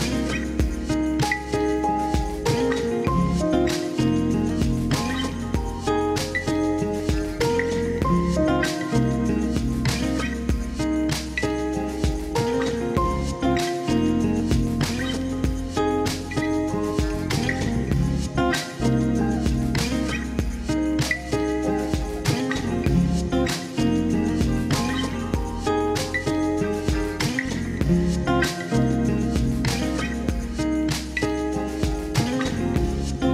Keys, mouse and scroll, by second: 0.8 click, 1.5 r, 3.4 click, 5.6 s, 5.8 x, 6.4 click, 7.3 r, 10.2 KP_3, 10.9 shift+middle click, 11.5 shift+middle click, 12.5 e, 14.2 middle click, 15.6 alt+z, 17.2 p, 18.3 click, 18.6 Tab, 19.9 Tab, 20.6 shift+click, 21.7 KP_3, 22.8 e, 24.0 click, 24.7 KP_1, 25.5 r, 26.0 click, 26.3 r, 26.6-27.8 drag, 27.8 KP_3, 28.9 e, 30.0 r, 30.3 click, 30.6 g, 31.8 click, 32.1 r, 32.5 click, 33.0 g.